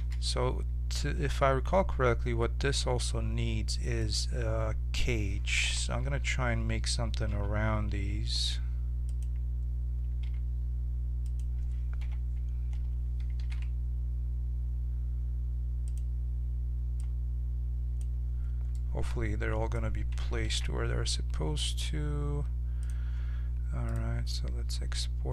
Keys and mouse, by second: 0.0 shift+a, 5.6 KP_7, 6.0 z, 7.3 g, 10.4 s, 12.0 KP_1, 13.3 s, 17.0-18.7 drag, 18.7-20.5 middle drag, 20.5 ctrl+a, 24.0-25.3 drag.